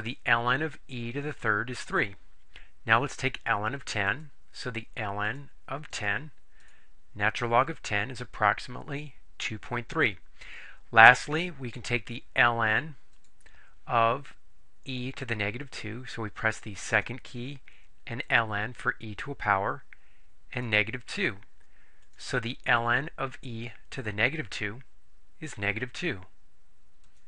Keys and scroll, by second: 5.4 1, 6.0 0, 6.6 Return, 21.2 2, 22.1 Return.